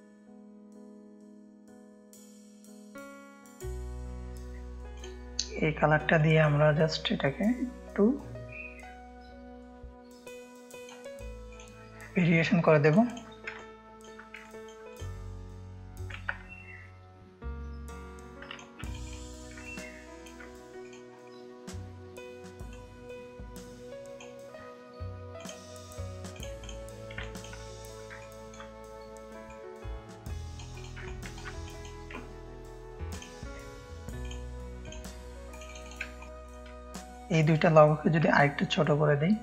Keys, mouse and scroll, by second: 3.4 ctrl+space, 3.4 click, 4.9-6.5 drag, 7.8-10.8 drag, 12.8 click, 13.5 ctrl+space, 13.5 ctrl+click, 14.4 click, 16.1-18.5 alt+shift+drag, 18.8 click, 19.6 ctrl+space, 19.6 ctrl+click, 20.8 click, 22.7-24.1 drag, 25.3 click, 26.3 click, 27.2 click, 27.2 space, 28.1 ctrl+space, 28.1 ctrl+click, 29.4 click, 30.7 click, 31.0 ctrl+space, 31.0 ctrl+click, 31.6 click, 35.6 click, 36.1 ctrl+space, 36.4 click, 37.0 shift+click, 38.1-39.4 alt+shift+drag.